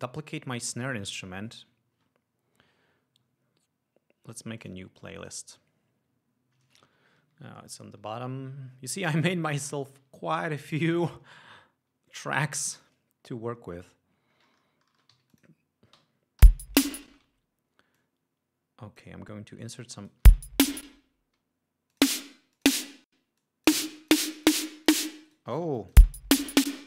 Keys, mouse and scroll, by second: 0.1 ctrl+click, 1.0 click, 4.9 click, 5.5-6.3 drag, 7.5 ctrl+Up, 9.2 ctrl+Down, 9.5 ctrl+Up, 10.3 ctrl+Down, 12.7 click, 14.0-14.7 ctrl+scroll up 4, 15.4 g, 15.6 click, 16.7 l, 17.4 space, 17.6 d, 18.3-19.5 drag, 19.6 ctrl+scroll up 2, 20.1 ctrl+click, 20.7 space, 22.2 click, 22.9 click, 23.6 click, 24.2 click, 24.6 click, 26.0 shift+click, 26.3 shift+space.